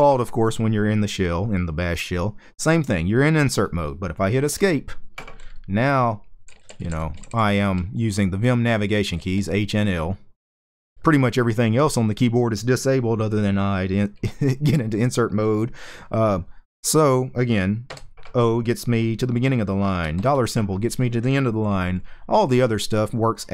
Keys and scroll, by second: 0.0-0.2 typing, 4.2 Escape, 5.9-10.7 typing, 17.6 o, 19.6-20.3 typing, 21.4-22.0 typing.